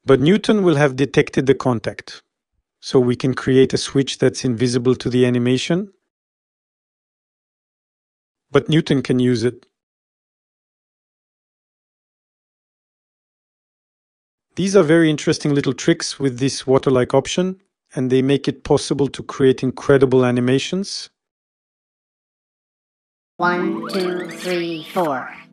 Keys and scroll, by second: 16.6 0.